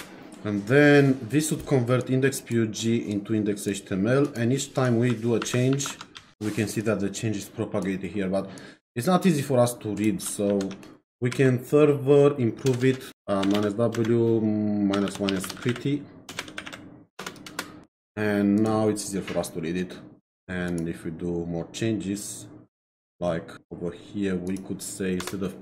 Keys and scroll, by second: 5.4 shift+1, 6.1 ctrl+s, 10.5 ctrl+c, 11.3 Up, 12.7-17.2 typing, 13.1 Up, 17.5 Return, 25.2 BackSpace.